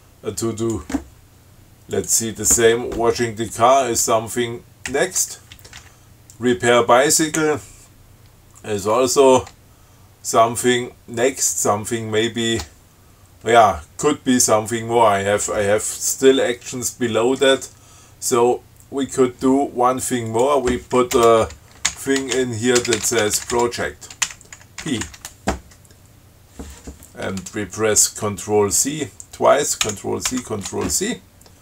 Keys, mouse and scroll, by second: 0.0-1.2 drag, 2.2 click, 5.1 shift+Right, 5.8 shift+Down, 10.6 shift+Right, 20.5 click, 21.3-25.0 typing, 30.0 ctrl+c.